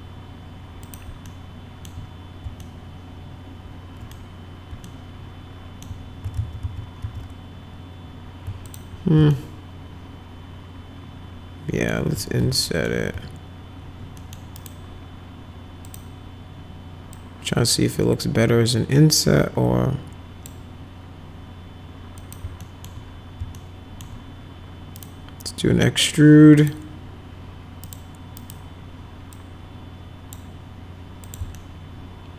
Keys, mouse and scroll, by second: 0.9 click, 1.3 alt+middle click, 2.6-4.1 alt+middle drag, 4.9 alt+middle click, 6.3 ctrl+z, 6.6 ctrl+z, 7.0 ctrl+z, 8.7 ctrl+click, 9.3-11.9 alt+middle drag, 12.6 alt+middle click, 14.2 middle click, 14.6 right click, 15.9 click, 17.1-20.5 drag, 22.2 click, 22.6 alt+middle click, 23.5 alt+middle click, 25.0 right click, 26.6 click, 27.9 right click, 28.4 right click, 29.3-30.3 drag, 31.2 click, 31.6-32.3 alt+middle drag.